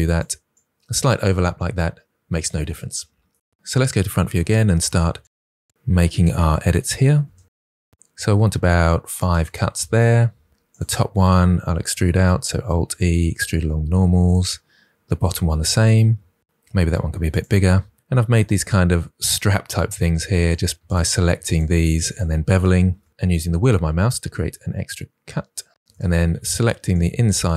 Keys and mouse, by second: 0.5 click, 3.8 KP_1, 4.2 Tab, 4.6 3, 4.8 alt+click, 5.3 alt+e, 6.2 ctrl+r, 9.1 click, 9.4 click, 10.5 3, 10.7 alt+click, 12.1 alt+e, 14.2 click, 15.6 alt+click, 16.0 alt+e, 17.6 click, 20.7 ctrl+z, 20.7 2, 20.8 alt+click, 22.1 alt+click, 22.8 ctrl+b, 25.3 shift+click, 25.8 2, 26.6 alt+click, 27.3 alt+click.